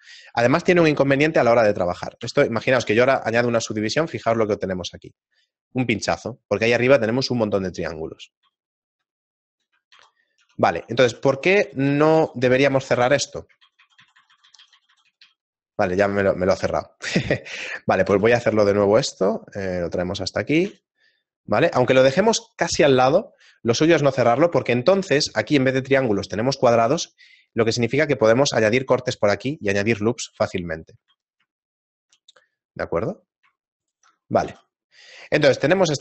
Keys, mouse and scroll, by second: 2.2 ctrl+2, 3.1 shift+middle click, 6.6 right click, 8.4 ctrl+z, 9.9 ctrl+z, 10.4 Tab, 11.0 shift+middle click, 11.6 ctrl+z, 11.9-13.3 ctrl+z, 13.3 middle click, 13.6 ctrl+z, 13.8 ctrl+z, 14.4 ctrl+z, 14.5 ctrl+z, 15.6 right click, 16.0 x, 16.7 shift+middle click, 17.4 alt+right click, 18.1 e, 18.4 s, 20.6 g, 23.2 shift+middle click, 23.8 middle click, 24.3 shift+middle click, 26.8 ctrl+r, 31.0 ctrl+z, 31.6 shift+middle click, 32.4 a, 33.1 scroll up 2, 33.8 alt+right click, 33.8 scroll up 2, 34.4 g.